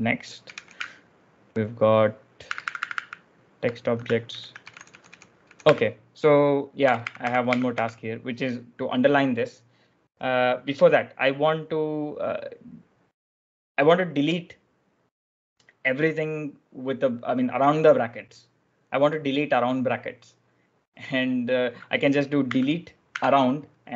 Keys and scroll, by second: 0.0-1.3 typing, 2.4 ctrl+e, 4.2 ctrl+u, 4.2-7.4 typing, 8.5 typing, 22.4-23.0 typing.